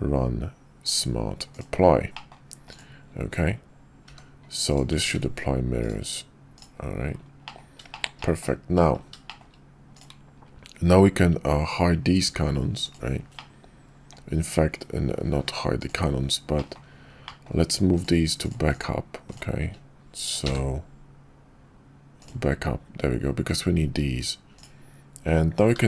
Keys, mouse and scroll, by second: 2.1 middle drag, 4.1 g, 5.0 ctrl+`, 7.4 middle drag, 7.9 shift+middle click, 8.2 middle drag, 9.2 shift+middle drag, 13.4-14.1 middle drag, 16.5 middle drag, 17.2 middle drag, 20.4 m, 25.7 g.